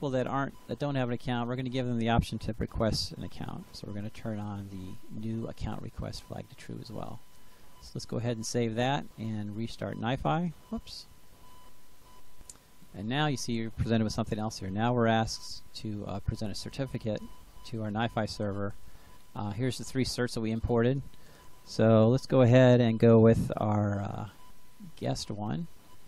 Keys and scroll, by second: 2.3-3.6 typing.